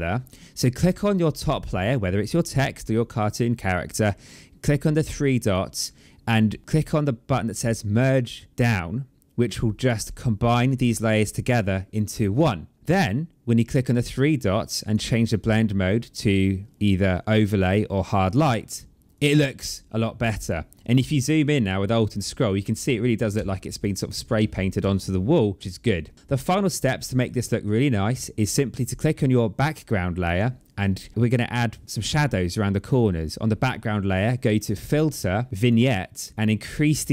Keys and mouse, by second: 0.1 click, 5.3 click, 9.9 click, 13.5 click, 14.7 click, 18.1 click, 23.2 space, 23.3 click, 24.2 ctrl+z, 26.1 click, 28.8 click, 34.3 click, 35.5 click, 36.9 click.